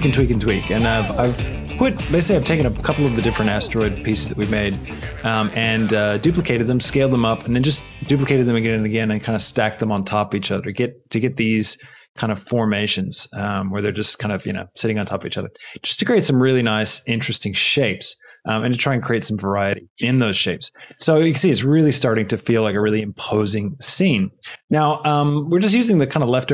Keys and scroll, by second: 13.3 g.